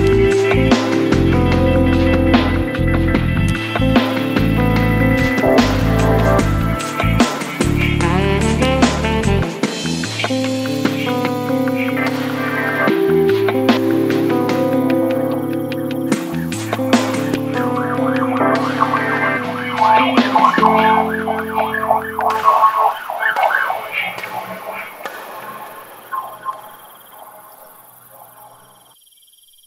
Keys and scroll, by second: 0.3 l, 2.5 v, 3.0 super++, 3.1 super+space, 3.5 shift+super+t, 5.6 BackSpace, 6.1 i, 7.0 BackSpace, 7.4 e, 8.8 super+0, 10.0 super++, 10.2 super++, 10.3 super+space, 11.1 v, 11.5 Tab, 13.3 s.